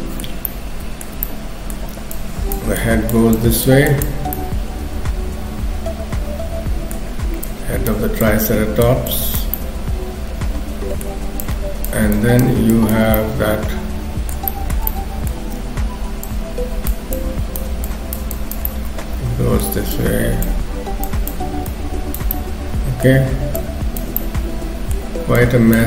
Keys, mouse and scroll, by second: 0.4 middle click, 2.2 click, 2.8 click, 3.9 click, 4.2-5.0 scroll down 2, 4.4 middle click, 7.4 click, 8.2 click, 9.6 middle click, 11.4 click, 12.2 click, 13.2 middle click, 14.5 shift+middle click, 14.9 middle click, 15.6 scroll up 1, 17.2 click, 17.9 click, 18.3 click, 18.7 middle click, 20.0 click, 21.0 click, 21.7 click, 22.3 middle click, 23.6 click, 24.2 middle click, 25.4 click.